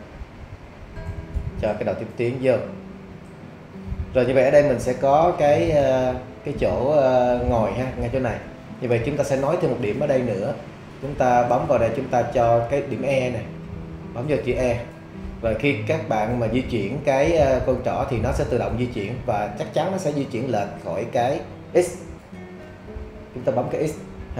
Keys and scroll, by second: 22.6 x.